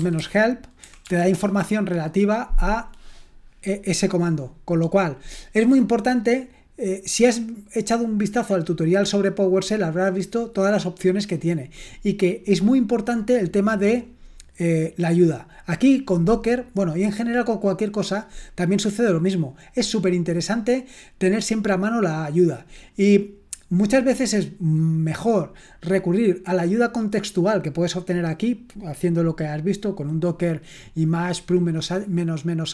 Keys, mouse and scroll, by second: 0.0-1.5 typing.